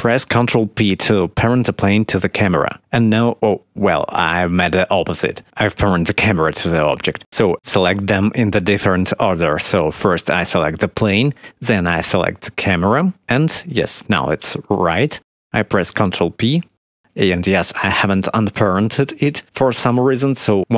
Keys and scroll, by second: 0.8 ctrl+p, 6.8 ctrl+z, 15.9 ctrl+p.